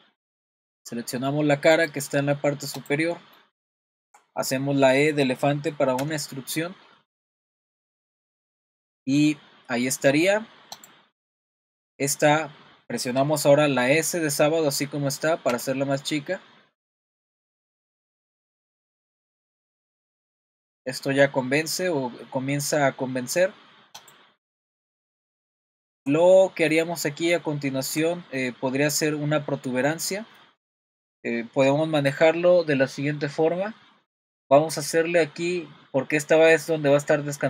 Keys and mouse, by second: 1.8 click, 2.9 click, 3.2 middle click, 3.8 shift+middle click, 6.0 e, 11.4 middle click, 15.5 s, 24.5 middle click, 25.7 shift+middle click, 26.4 middle click, 27.4 shift+middle click.